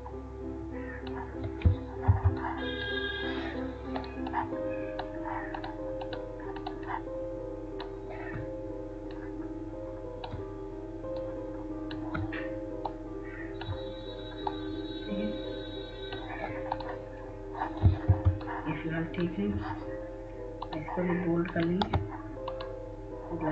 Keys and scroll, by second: 3.5 F2, 19.5 F2.